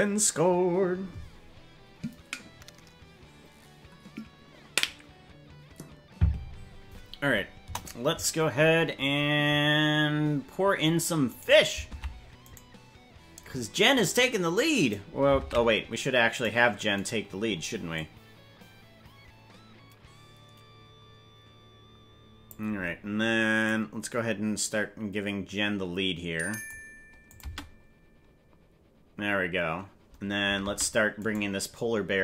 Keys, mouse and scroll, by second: 7.6 KP_0, 8.6-9.7 scroll down 7, 9.7-10.0 scroll down 3, 10.1 scroll up 3, 11.3 right click, 12.0 ctrl+Tab, 12.5 right click, 14.0 click, 15.4 ctrl+Tab, 16.4 right click, 17.0 right click, 17.9-22.5 drag, 23.6-26.7 drag, 27.3 click, 27.5 space, 30.8 space, 31.4 right click.